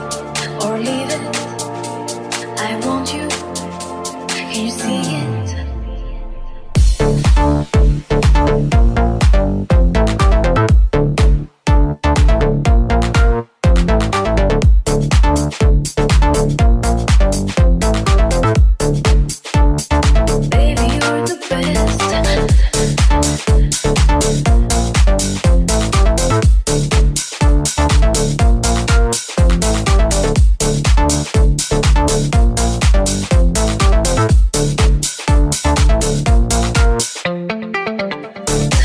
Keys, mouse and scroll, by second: 22.0 middle click, 24.1-31.1 middle drag, 31.1-38.8 middle drag.